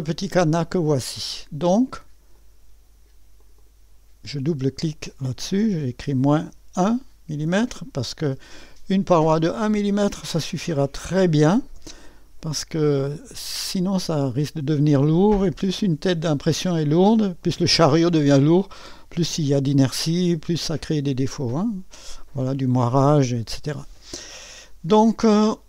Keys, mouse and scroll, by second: 0.5 click, 2.3 click, 3.4 click, 3.7 click, 5.7 KP_Subtract, 6.0 KP_1, 6.4 Return, 8.9 click, 10.2 -, 11.2 1, 11.8 Return, 13.4 typing, 13.7-16.2 drag, 21.0-22.8 drag.